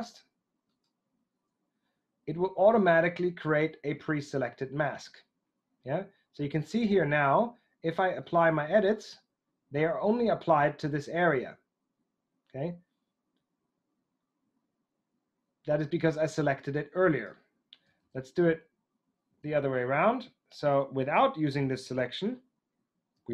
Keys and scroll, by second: 18.0 super+z, 19.4 super+z.